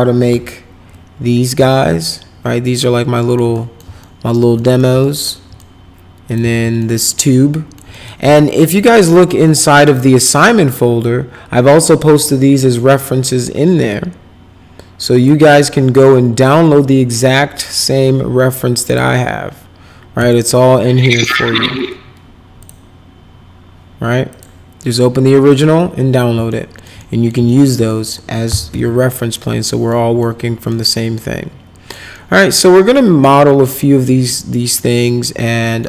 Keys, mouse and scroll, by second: 0.3 p, 1.7-3.3 alt+middle drag, 3.5 middle click, 4.0 alt+middle click, 4.6 middle click, 5.0 alt+middle click, 6.2 click, 6.4 z, 6.8 alt+middle click, 7.3 alt+middle click, 7.9 middle click, 8.4 alt+middle click, 9.4 click, 9.8 click, 15.1 click, 18.8 click, 20.2 click, 22.6 click, 24.3 click, 25.5 click, 26.5 alt+middle click, 27.0 middle click, 27.5 alt+middle click, 27.9 middle click, 28.2-29.2 typing, 29.1 middle click, 29.7 middle click, 30.2 middle click, 30.9 middle click, 32.1 middle click, 32.6 middle click, 33.2 middle click, 33.8 middle click, 34.3 middle click, 34.9 middle click.